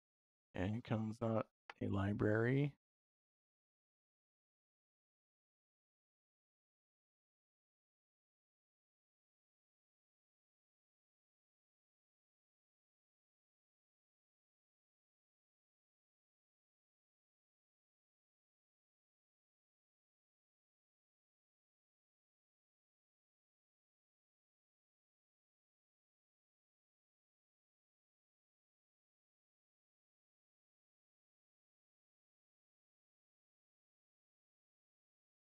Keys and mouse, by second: 5.7 middle click, 7.3-8.7 drag, 17.8 click, 22.0 click, 27.0 middle click, 27.9 click, 34.4 middle click, 35.3 middle click.